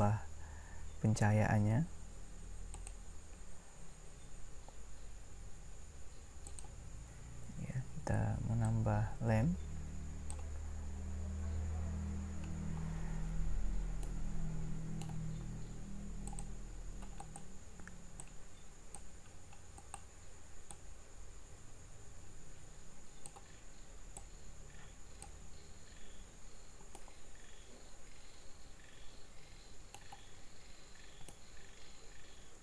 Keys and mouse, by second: 8.6 click, 17.2-18.4 right drag, 21.7 click, 27.0-28.8 middle drag, 30.9 middle click.